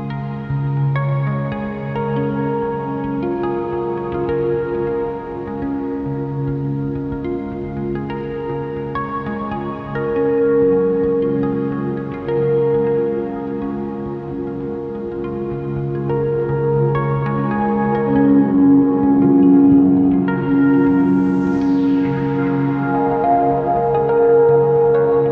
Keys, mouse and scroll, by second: 0.3 scroll down 1, 0.8 scroll up 1, 1.0 shift+click, 1.7 scroll down 1, 1.9 scroll up 1, 2.5 scroll up 1, 4.9 KP_7, 5.1 click, 5.3 shift+click, 7.1 Tab, 7.7 a, 9.1 s, 10.7 click, 10.9 Tab, 11.0 alt+a, 11.9 r, 12.4 right click, 13.3 shift+g, 13.7 click, 16.3 shift+click, 16.5 z, 17.1 shift+click, 18.5 r, 19.1 right click, 20.1 ., 21.3 r, 23.6 right click.